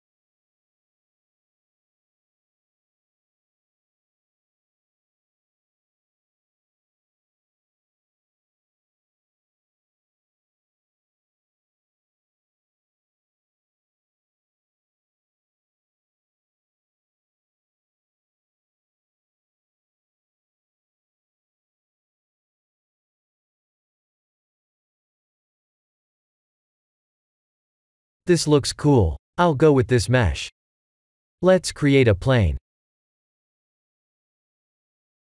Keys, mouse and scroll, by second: 1.5 click, 7.3 click, 11.9 middle click, 12.4 shift+z, 15.0 click, 15.8 middle click, 15.9 middle click, 17.9 middle click, 22.0 click, 23.9 click, 26.7 click, 27.4 middle click, 29.3 middle click, 29.6 Tab, 30.0 middle click, 32.9 middle click, 33.0 click, 33.9 shift+a.